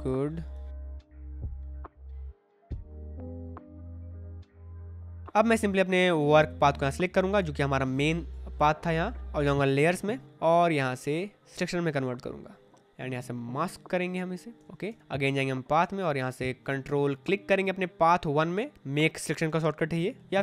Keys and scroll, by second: 1.7 ctrl+z, 4.9 space, 10.2 space, 14.5 space, 20.3 ctrl+z.